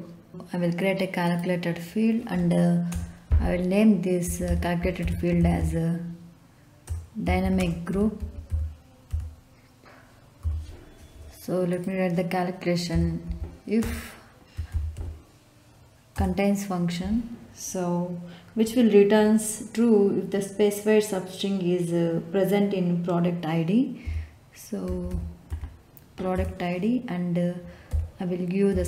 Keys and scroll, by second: 2.8 BackSpace, 4.0-9.0 typing, 10.4 p, 12.9-15.4 typing, 16.1 Return, 24.0-25.9 typing, 26.3 Return, 27.8 ', 28.6 '.